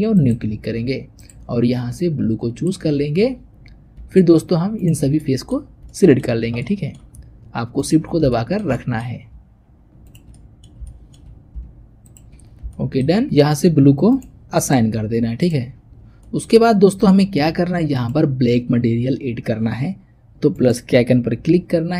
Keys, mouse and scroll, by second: 3.1-3.4 scroll up 2, 3.4-3.8 scroll down 2, 4.6 shift+click, 5.1 middle click, 5.6 scroll up 2, 5.8-7.6 shift+middle drag, 7.6 shift+click, 8.0 scroll down 1, 8.2-9.9 shift+middle drag, 9.9 shift+click, 10.2 middle click, 11.1-11.9 scroll up 2, 11.9 shift+click, 12.3 scroll down 3, 12.6 shift+middle click, 13.1-14.0 scroll up 1, 14.0 click, 14.4 click, 15.8-16.1 scroll down 1, 16.1 shift+middle click, 16.5-17.0 scroll up 1, 17.0 shift+middle click, 17.8 click, 20.4-21.9 drag.